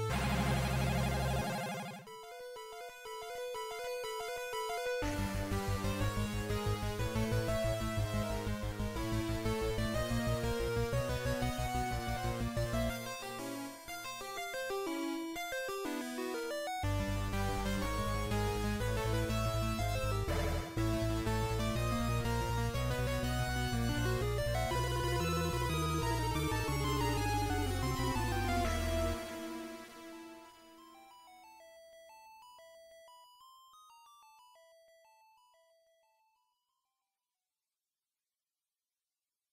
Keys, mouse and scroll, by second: 0.5 shift+right click, 6.9 f, 8.5 right click, 10.3 shift+right click, 11.9 shift+right click, 14.3 f, 15.5 right click, 16.9 shift+right click, 18.9 shift+right click, 20.5 f, 22.3 right click, 22.9 shift+right click, 23.7 shift+right click, 25.1 shift+right click, 25.1 f, 25.5-26.1 scroll down 1, 26.1-26.9 scroll down 2, 26.5 middle click, 31.5 alt+right click, 33.1 ctrl+KP_7, 34.5 scroll down 1, 35.1 scroll down 2, 35.3 shift+middle click, 37.9 click.